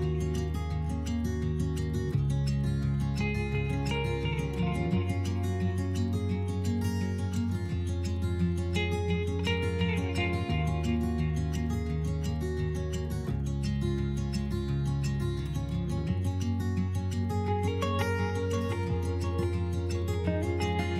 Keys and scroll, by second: 1.6-2.5 typing, 5.0 s, 7.5 s, 12.5 s, 13.9 s, 17.2 s.